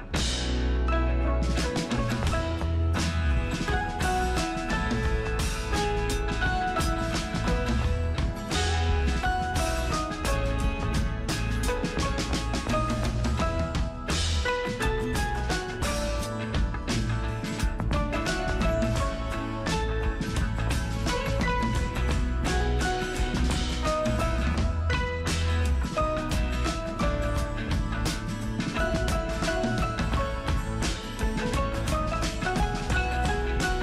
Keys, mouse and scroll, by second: 0.2 super+click, 5.5 super+click, 6.9 scroll down 1, 7.5-8.4 alt+super+scroll down 1, 28.9 super+click, 32.1 super+click.